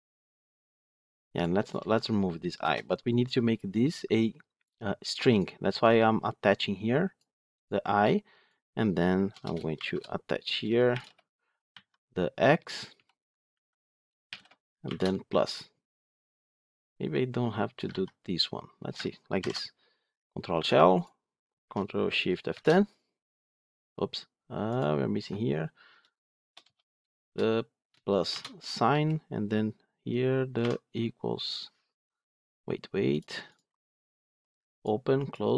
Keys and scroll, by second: 17.8 ctrl+x, 19.3 ctrl+alt+l, 22.4 ctrl+shift+F10.